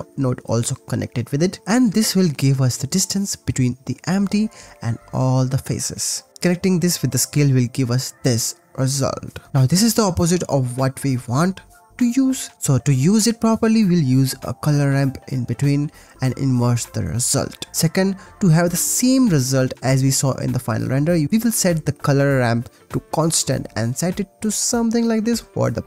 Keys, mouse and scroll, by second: 1.6 click, 2.3 click, 2.8 click, 3.2 g, 3.7 click, 4.1 click, 4.4 click, 4.8 click, 5.3 click, 6.1-7.7 drag, 9.1-10.9 drag, 11.9 click, 12.4 g, 12.6 click, 12.8 click, 13.0 shift+a, 15.2-16.4 drag, 16.7-18.4 drag, 18.8 click, 20.1-20.5 drag, 20.5-20.9 middle drag, 22.5-23.6 drag, 24.4 middle click, 24.9 click, 25.1 click, 25.3 click, 25.5 click.